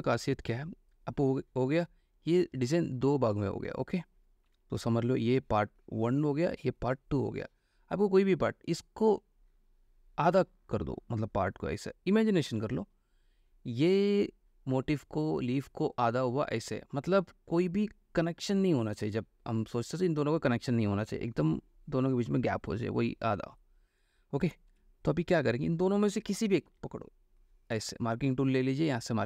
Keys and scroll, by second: 5.0 F3, 24.9 Escape, 26.9 m.